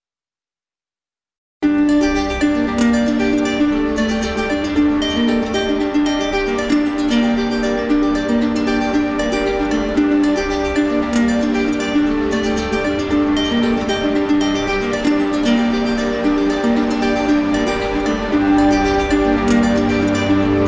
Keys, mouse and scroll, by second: 0.5 shift+click, 1.2 shift+click, 3.6 shift+click, 4.0 alt+click, 5.1 z, 5.9 click, 6.7 middle click, 7.0 right click, 7.9 click, 8.6 alt+click, 9.1 alt+click, 9.6 alt+click, 10.6 right click, 11.6 right click, 13.3 right click, 14.2 click, 14.6 click, 15.4 click, 16.0 shift+click, 16.1 shift+click, 16.5 shift+click, 16.7 shift+click, 17.0 shift+click, 17.4 shift+click, 18.3 right click, 18.9 right click, 19.6 click, 20.3 ctrl+z.